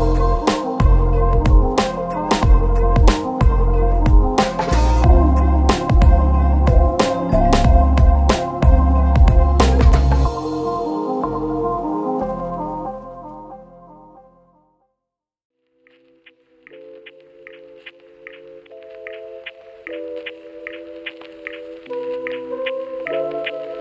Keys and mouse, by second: 0.6 ctrl+z, 0.8 shift+middle click, 1.3 Tab, 1.5 shift+middle click, 1.5-4.0 typing, 1.9 click, 2.7 shift+middle click, 2.8 ctrl+z, 3.1 shift+click, 3.2 middle click, 4.1 click, 4.2 click, 5.3 shift+click, 5.6 ctrl+q, 5.6 ctrl+click, 6.0 Tab, 6.2 ctrl+2, 6.2 ctrl+click, 6.9 Tab, 7.2 Tab, 7.5 Tab, 7.6 shift+click, 8.0 Tab, 8.0 q, 8.2 Tab, 8.6 Tab, 8.8 u, 9.1 shift+click, 9.2 shift+middle click, 9.6 shift+middle click, 10.0 q, 10.4 q, 10.8 shift+middle click, 11.2 q, 11.9 shift+middle click, 12.5 q, 12.6 shift+middle click, 12.8 q, 12.8 shift+middle click, 13.4 shift+middle click, 14.1 q, 14.2 shift+middle click, 14.9 q, 15.1 Tab, 15.3 middle click, 15.6 shift+middle click, 15.9 q, 16.1 shift+middle click, 17.6 shift+middle click, 19.9 middle click, 20.2 middle click, 20.8 middle click, 21.0 a, 21.3-22.7 middle drag, 23.5 ctrl+s.